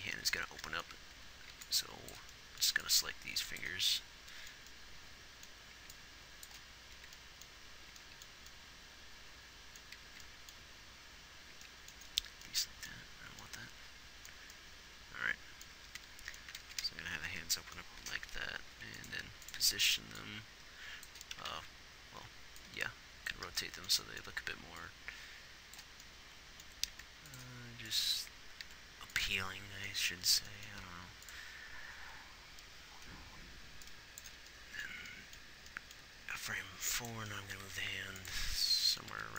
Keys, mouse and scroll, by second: 0.0-1.9 typing, 2.0-3.1 drag, 3.1 b, 6.0 b, 7.7 b, 8.7 b, 10.9 b, 12.3 b, 16.1 z, 17.1 alt+r, 18.4 z, 19.1 z, 22.0 ctrl+z, 27.3 r, 29.0 r, 36.7 g, 38.0 r.